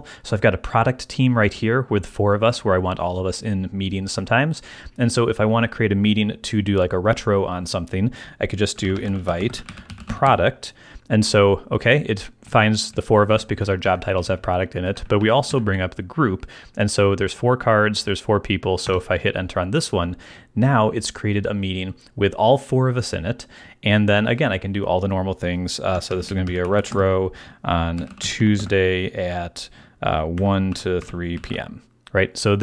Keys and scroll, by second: 8.5-10.7 typing, 12.4 Down, 13.4 Up, 14.1 Down, 14.8 Up, 18.8 Return, 25.8-28.8 typing, 30.1-32.0 typing.